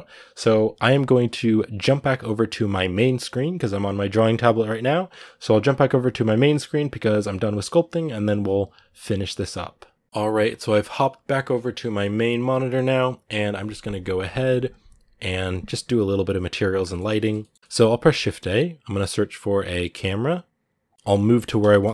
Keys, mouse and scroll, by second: 16.6-20.7 middle drag, 20.7 shift+a, 20.9-21.9 shift+middle drag.